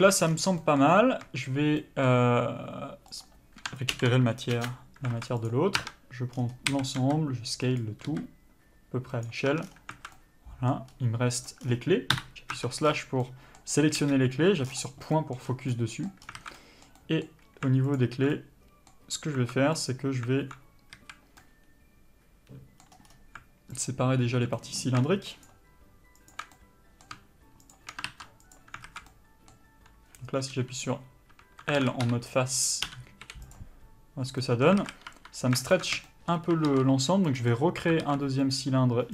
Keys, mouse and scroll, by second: 0.1 KP_Divide, 0.6 scroll down 1, 0.9 middle click, 1.2 scroll up 1, 2.1 shift+middle click, 3.5 shift+click, 4.9 ctrl+l, 5.0 Return, 5.4 alt+a, 5.8 click, 6.1 Tab, 7.0 a, 7.3 s, 9.8 Tab, 9.9 scroll down 1, 10.2 alt+a, 10.5 middle click, 11.2-11.8 scroll up 1, 11.8 click, 11.9-12.4 scroll down 1, 12.4 KP_Divide, 12.8 Tab, 13.1-13.5 scroll up 1, 13.5 middle click, 14.3 KP_Decimal, 14.9-15.5 scroll down 1, 15.5 middle click, 15.7 scroll up 1, 16.0 middle click, 16.5 scroll up 1, 16.7 alt+a, 16.9 middle click, 18.2 alt+click, 18.6 middle click, 20.0 click, 21.3 a, 21.7 middle click, 23.2 scroll up 1, 24.1 alt+click, 24.8 middle click, 25.7 alt+shift+click, 26.8 middle click, 28.0 shift+click, 28.8 ctrl+e, 29.1 alt+a, 29.4 middle click, 30.8 l, 32.1 alt+a, 32.3 3, 33.1 l, 33.8 u, 34.6 scroll up 1, 34.7 middle click, 35.1 alt+a, 35.4 2, 36.0 alt+shift+click, 36.2 scroll down 1, 36.3 shift+middle click, 37.7 ctrl+e, 37.8 middle click, 38.3 alt+a, 38.7 click.